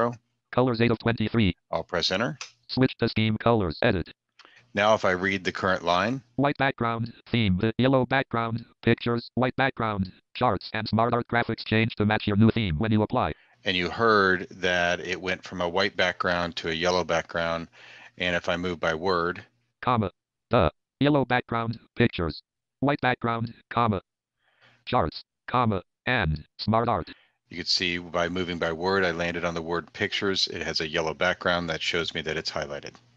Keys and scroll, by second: 2.2 Return.